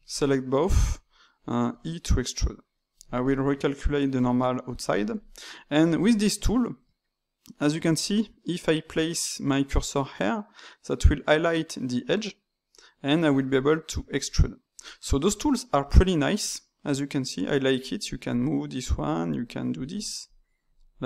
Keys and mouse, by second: 0.0 shift+click, 1.6 e, 2.7-4.1 middle drag, 4.1-6.0 drag, 6.0-9.4 shift+middle drag, 12.6-15.0 drag, 15.0-16.3 middle drag, 16.3-21.0 drag.